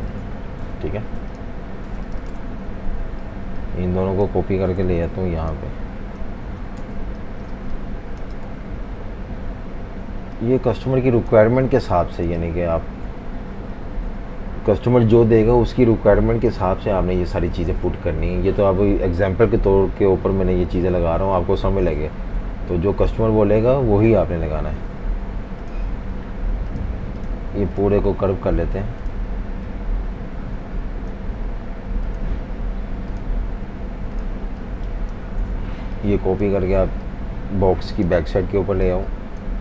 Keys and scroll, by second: 0.0-0.6 typing, 2.4 super+-, 2.6 super+-, 2.8 super+-, 4.8 super+c, 6.5-8.5 typing, 6.8 super+-, 11.7 v, 11.8 space, 13.6 F18, 24.8 F19.